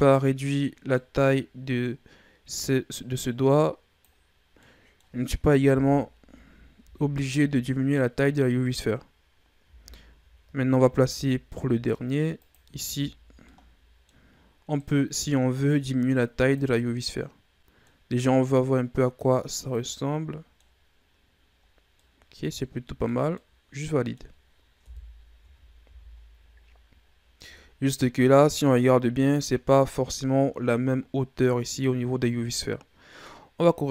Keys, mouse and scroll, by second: 0.0-0.8 scroll up 1, 0.8-2.4 middle drag, 2.4-4.4 drag, 4.4 scroll down 1, 4.5-5.6 middle drag, 5.6 KP_1, 6.7 KP_3, 7.8-8.7 scroll up 5, 8.8-9.6 scroll up 2, 9.6 z, 10.8 shift+d, 12.5 z, 12.9-13.4 scroll up 5, 13.4 middle click, 14.3-14.6 scroll up 1, 14.6 middle click, 15.5-16.6 drag, 16.6-18.4 middle drag, 18.4-19.8 drag, 19.8-24.7 middle drag, 24.7 KP_3, 25.3 Tab, 25.7 a, 26.0-26.9 scroll down 5, 26.9-27.4 scroll up 2, 27.4-28.2 scroll down 4, 28.2-30.0 scroll down 3, 30.0-31.3 scroll down 1.